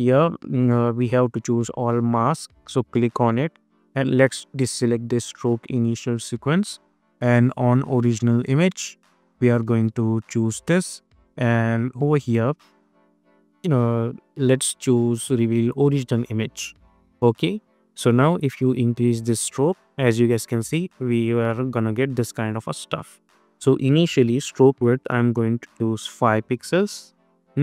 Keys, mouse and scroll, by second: 1.5 click, 5.9 click, 13.2 click, 15.8 click, 18.2-23.4 drag, 25.0 Return, 25.6 click.